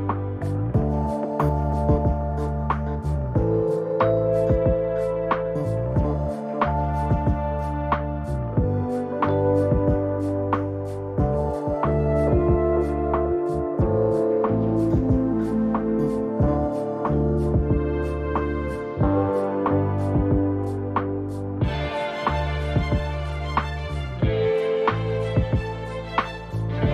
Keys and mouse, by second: 3.4 click, 8.3 shift+a, 12.5 shift+a, 20.6 g, 23.8-24.5 middle drag, 26.2 g.